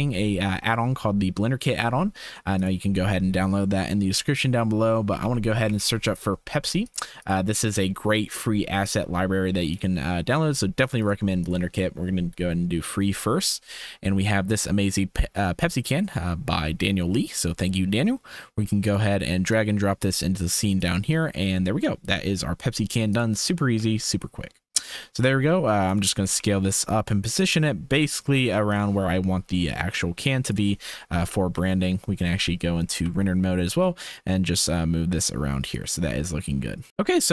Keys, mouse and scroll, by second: 0.1 n, 2.7-6.8 drag, 7.4 click, 9.7 click, 11.0 click, 11.4 click, 20.8 typing, 23.7 s, 26.3 g, 28.0 s, 29.6-30.5 drag, 31.2 z, 32.8 r, 36.9 ctrl+s.